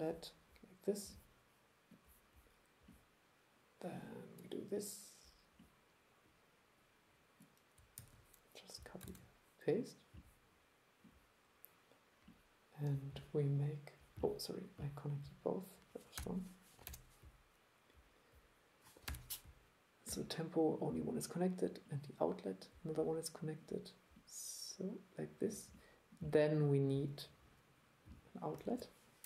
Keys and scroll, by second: 8.0 super+x, 9.1 super+v, 28.7 super+1.